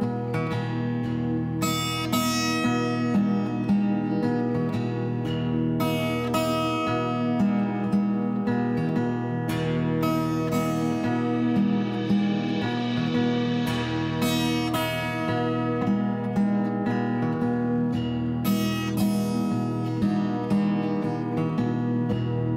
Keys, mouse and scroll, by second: 0.3 click, 0.7 z, 1.2 s, 3.1 click, 5.5 click, 6.4 2, 7.5 g, 7.7 z, 8.9 click, 9.4 middle click, 10.2 3, 10.4 click, 11.1 k, 12.5 click, 13.2 1, 13.6 click, 13.8 click, 14.5 click, 14.9 click, 15.4 shift+f, 15.9 click, 16.3 click, 16.6 middle click, 16.9 click, 17.7 click, 17.9 middle click, 18.7 click, 19.2 click, 19.7 shift+f, 20.2 click, 20.6 click, 21.1 click, 21.6 click, 22.2 shift+f.